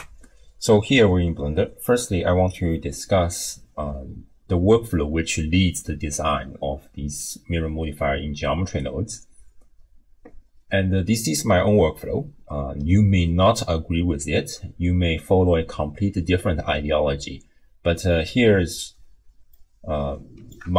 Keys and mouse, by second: 19.5-20.6 drag.